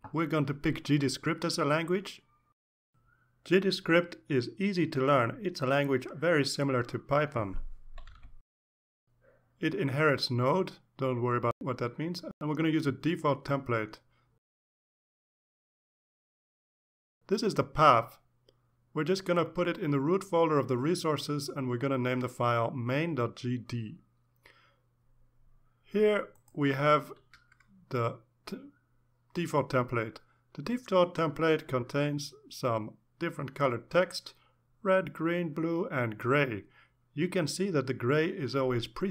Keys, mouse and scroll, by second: 0.1 click, 2.0 click, 8.9 click, 9.5 click, 12.4 click, 13.6 click, 16.3 click, 16.7 click, 25.0 click, 27.9 click, 38.7-39.1 drag.